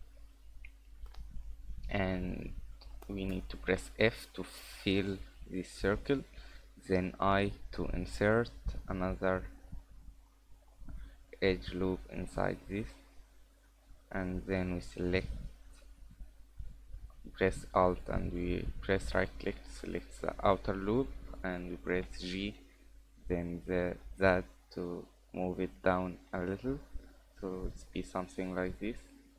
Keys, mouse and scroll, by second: 0.3-1.1 scroll up 1, 1.1 scroll up 2, 1.3 shift+middle click, 1.9 middle click, 3.7 f, 7.3 i, 14.2 middle click, 14.9 alt+right click, 15.9 middle click, 18.2 alt+right click, 22.0 g, 26.3 middle click, 28.7-29.3 scroll down 4, 29.2 scroll up 3.